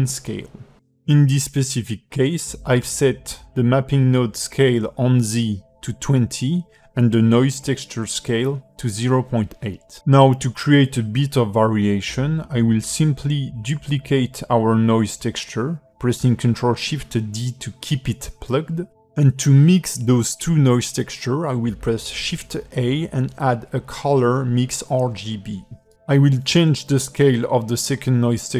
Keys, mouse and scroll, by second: 0.5 click, 0.8 middle click, 9.8 middle click, 9.8 scroll up 4, 10.4 shift+middle click, 11.2 scroll down 3, 11.6 ctrl+middle click, 12.5 shift+middle click, 13.1-13.4 scroll up 3, 13.6 click, 14.7 shift+middle click, 15.0 scroll up 3, 15.9 ctrl+shift+d, 18.4 shift+middle click, 19.5 click, 21.0 shift+a, 27.3 click.